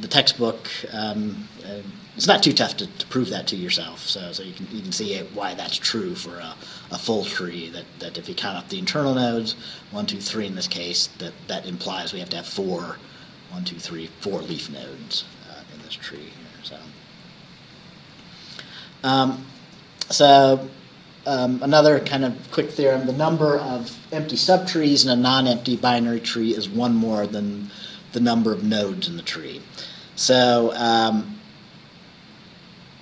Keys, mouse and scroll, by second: 16.1 Right.